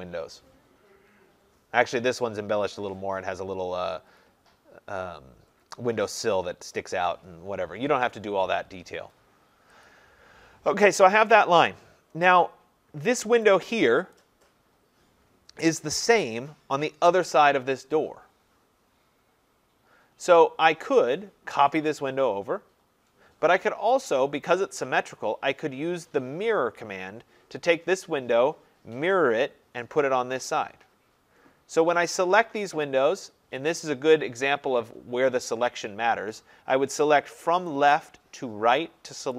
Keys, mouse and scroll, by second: 9.9 click, 13.5 click, 14.2 click, 24.2 Escape, 32.3 click, 33.5 Escape, 37.9 click.